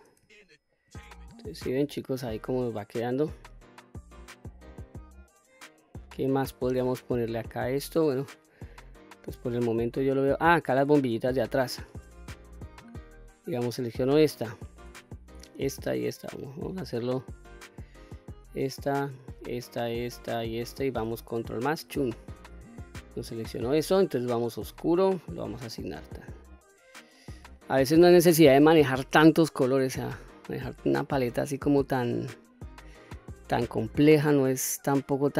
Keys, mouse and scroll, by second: 0.2 shift+middle click, 0.9-6.8 middle drag, 7.3 middle click, 8.5 middle click, 9.7 middle click, 10.3-10.7 scroll up 2, 10.8-11.3 shift+middle drag, 11.7-13.0 middle drag, 13.7 click, 14.2 middle click, 15.1 shift+click, 16.0 shift+click, 16.9 shift+click, 18.2 shift+click, 19.1 shift+click, 19.6 shift+click, 20.3 shift+click, 21.6 ctrl+KP_Add, 24.6 click, 25.3 click, 26.0 click, 26.4 scroll down 1, 26.8 middle click, 27.9 middle click, 29.3-30.1 scroll up 2, 30.1-31.2 middle drag, 32.2-32.5 scroll down 1, 32.7 middle click, 33.9-35.2 middle drag.